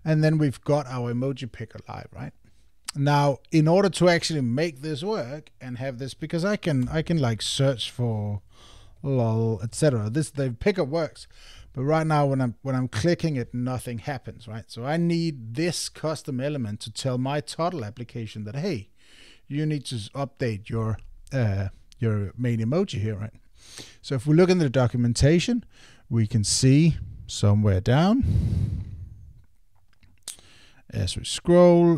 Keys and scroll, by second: 9.7 super+BackSpace.